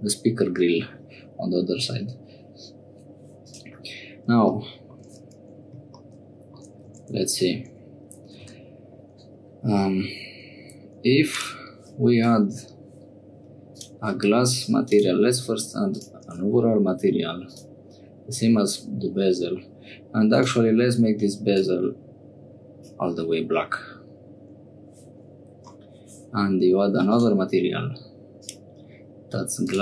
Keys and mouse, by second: 3.4 click, 6.0 click, 6.9 Tab, 7.7 Tab, 8.5 3, 11.3 click, 13.7 click, 14.9 click, 15.9-17.6 drag, 20.3 click, 27.1 click, 28.4-29.8 drag.